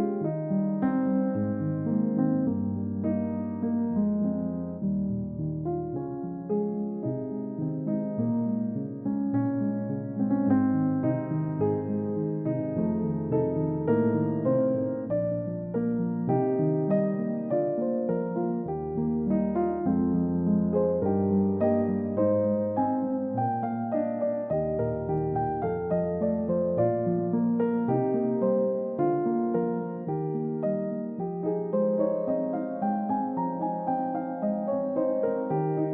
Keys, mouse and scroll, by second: 0.2-1.1 scroll up 1, 1.1 middle click, 3.2 scroll up 1, 6.4 ctrl+z, 13.7 3, 15.3-17.1 scroll down 1, 17.4 ctrl+d, 18.8 double click, 25.1-25.8 scroll up 1, 31.4 double click, 33.0 ctrl+d.